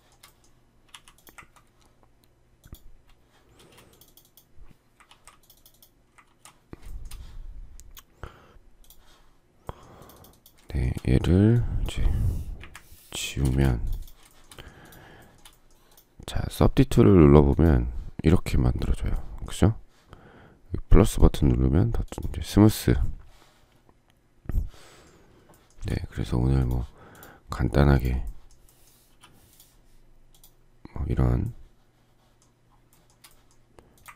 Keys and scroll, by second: 12.5 Delete, 13.3 space, 13.4 Escape, 29.0 p.